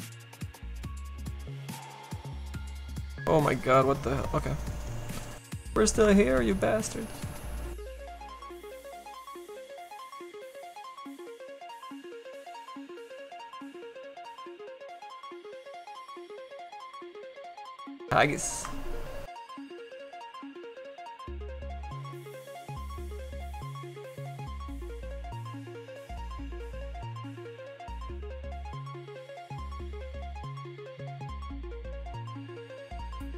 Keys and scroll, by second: 11.3 s, 23.3 s.